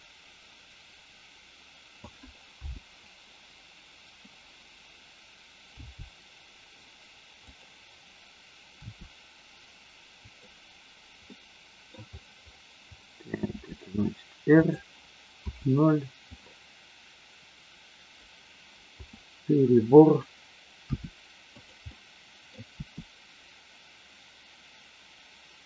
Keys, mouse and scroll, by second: 2.6 KP_0, 5.7 g, 7.5 click, 8.8 r, 10.4 click, 11.3 middle click, 13.6 r, 14.6 click, 15.3 KP_0, 18.9 KP_0, 20.9 r, 21.5 click, 21.9 middle click, 22.5 scroll down 1, 22.7 r.